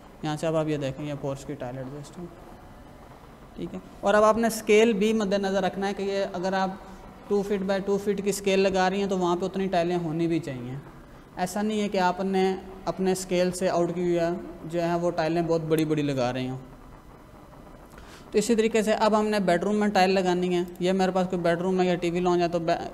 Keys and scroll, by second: 18.5 ctrl+=.